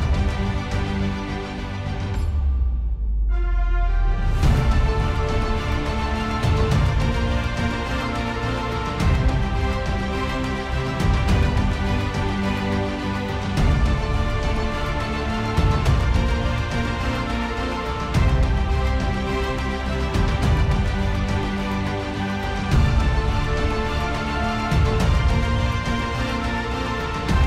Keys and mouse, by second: 7.6 ctrl+z, 12.8 ctrl+z, 23.8 ctrl+z, 24.3 middle click, 25.4 middle click, 27.1 middle click.